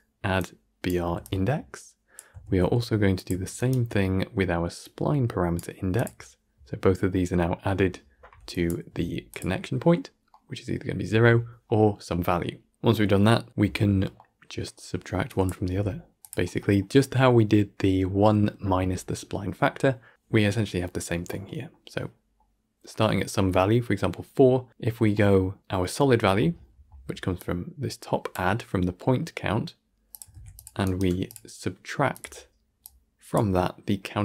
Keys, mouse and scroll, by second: 0.3-0.8 drag, 1.1-2.3 drag, 2.3 ctrl+shift+d, 3.6 ctrl+right click, 4.7-5.4 drag, 5.8-8.4 drag, 15.2 click, 30.1 click, 30.2 shift+d, 30.9-32.1 alt+right drag, 32.1-33.2 drag.